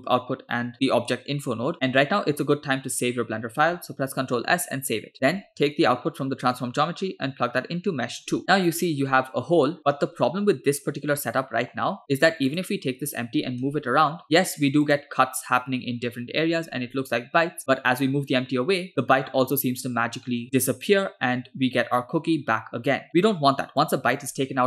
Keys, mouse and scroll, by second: 5.1 middle click, 6.6 click, 6.9-8.4 drag, 8.4-9.0 middle drag, 11.4 middle click, 12.5 click, 13.7 g, 16.7 g.